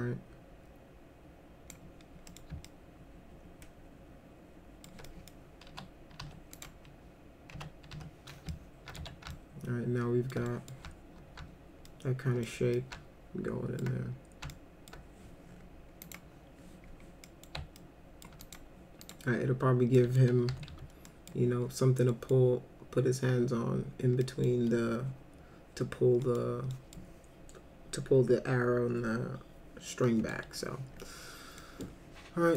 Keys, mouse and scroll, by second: 2.3 middle click, 2.7-4.9 alt+middle drag, 5.1 middle click, 5.7 F4, 6.2 F4, 6.6 click, 7.6 F3, 7.9 F4, 8.5 alt+middle click, 9.0 z, 9.3 alt+middle click, 10.5 middle click, 11.9 alt+middle click, 12.8-13.8 alt+middle drag, 14.5 alt+middle click, 16.0 click, 17.3 middle click, 17.8 alt+middle click, 18.4 click, 19.0 click, 20.0 middle click, 20.2-21.2 typing, 21.1 middle click, 22.1 middle click, 24.2 middle drag, 26.3 middle click, 26.7 middle drag, 30.1 middle drag, 31.6 middle click.